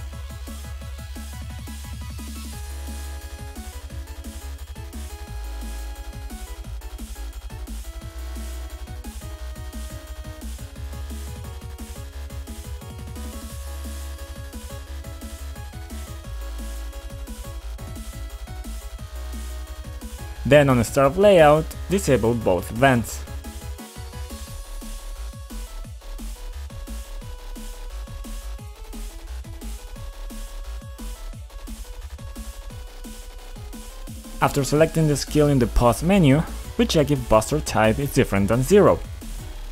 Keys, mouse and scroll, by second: 2.0 click, 3.6 click, 5.5 click, 9.6 click, 10.2 click, 10.2 b, 11.2 click, 11.3 click, 12.0 click, 13.6 click, 15.7 click, 19.1 click, 19.8 click, 19.9 click, 20.9 click, 22.5 click, 23.3 ctrl+click, 24.1 click, 24.2 double click, 28.6 click, 29.3 click, 29.9 click, 30.8 click, 33.0 click, 33.1 double click, 34.0 double click, 34.0 double click, 34.2 double click, 35.4 click, 35.7 double click, 36.3 double click, 37.2 click, 37.6 click, 38.9-39.7 typing.